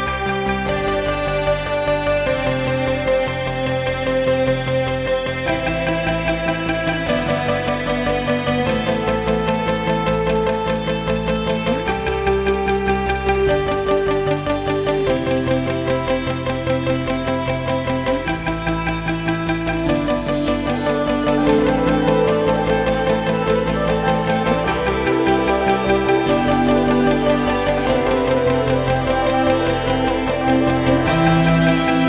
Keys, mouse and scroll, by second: 1.2-1.6 scroll down 3, 2.2-2.8 drag, 3.1 click, 3.9-4.5 drag, 5.8-6.3 drag, 6.5-7.4 drag, 7.6 click, 8.7 scroll up 2, 9.5-10.4 drag, 10.9-11.5 ctrl+scroll down 2, 12.6-13.7 drag, 14.9-15.4 drag, 16.7-17.2 drag, 17.6-18.2 drag, 18.4 click, 19.1-20.6 drag, 20.8-21.2 drag, 21.3-22.1 drag, 22.2 click, 22.5 click, 23.9-24.4 drag, 24.6 click, 26.1 click, 27.1 click, 28.8-30.3 drag, 30.8-31.5 shift+drag.